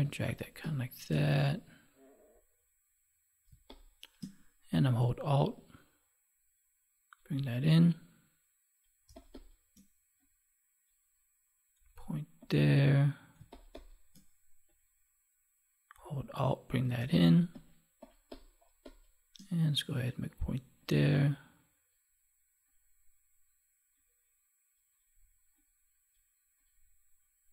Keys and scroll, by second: 3.4 space, 9.0 space, 13.3 space, 16.9 space.